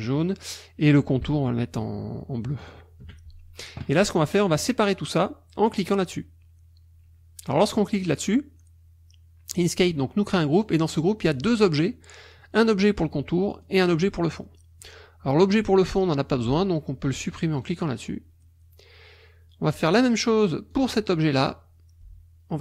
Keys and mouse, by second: 0.0 click, 2.6 shift+click, 4.6 click, 7.5 click, 10.7 click, 11.4 click, 13.6 click, 17.6 click, 20.7 click.